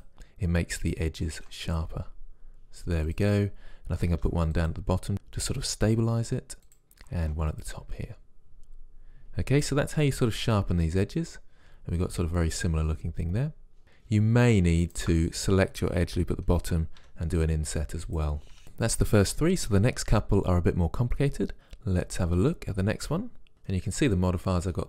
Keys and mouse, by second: 0.1 ctrl+r, 1.5 ctrl+r, 4.1 ctrl+r, 7.2 ctrl+r, 10.7 Tab, 14.9-16.5 drag, 16.7 middle click, 17.0 i, 22.1-23.7 drag.